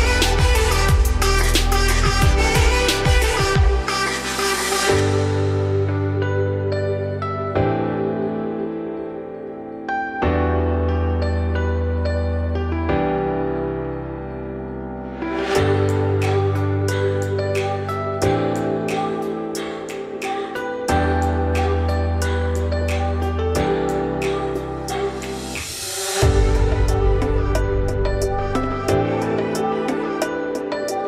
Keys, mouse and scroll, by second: 8.6-9.5 scroll down 4, 9.5 ctrl+b, 10.4 ctrl+v, 10.9-11.9 scroll up 5, 11.9 g, 13.9-14.2 shift+middle drag, 14.2-14.8 scroll up 3, 14.8-16.0 scroll down 1, 16.1 click, 17.6 click, 18.3 `, 18.9-19.4 scroll up 2, 19.4 shift+middle drag, 19.7-20.2 scroll up 2, 20.2 Tab, 20.5 scroll up 2, 20.8 1, 21.3 scroll down 1, 21.5 z, 21.8-22.5 scroll up 2, 22.5 shift+middle click, 23.4 click, 24.1 scroll up 3, 24.3 g, 26.8-30.9 drag.